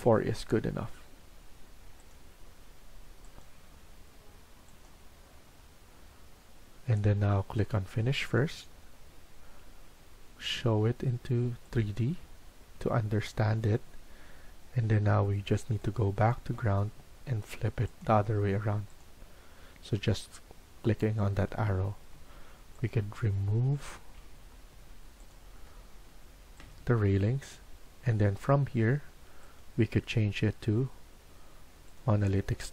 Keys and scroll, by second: 1.6 4, 21.5 Escape, 22.1 Escape, 24.1 Delete, 25.5 Delete.